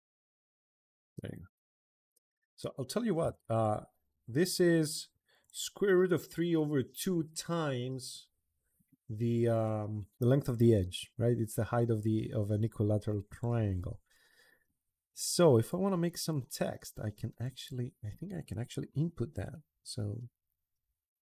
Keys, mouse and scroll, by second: 0.2 click, 0.8 middle click, 1.6 click, 1.8 Escape, 2.0 Escape, 2.1 Escape, 2.3 middle click, 3.0 d, 3.3 click, 5.2 click, 13.1 click, 13.8 Escape, 14.3 Escape, 15.4 click, 17.2 click.